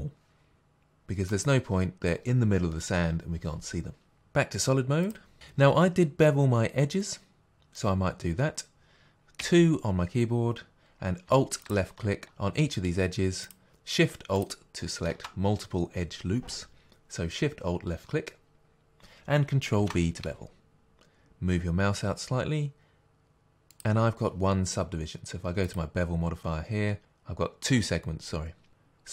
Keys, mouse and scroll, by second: 5.0 click, 9.4 2, 11.6 alt+click, 13.4-15.4 drag, 19.8 ctrl+b, 24.2 click.